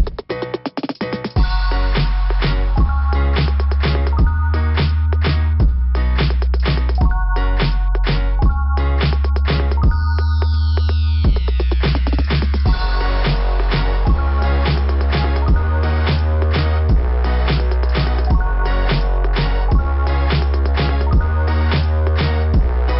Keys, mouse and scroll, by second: 5.9 click, 6.1 click, 7.0 click, 10.8 click, 10.9 click, 11.1 click, 11.2 click, 11.4 click, 11.5 click, 11.7 click, 11.8 click, 12.0 click, 12.2 click, 12.4 click, 12.5 click, 14.5 scroll up 2, 18.9 scroll up 2.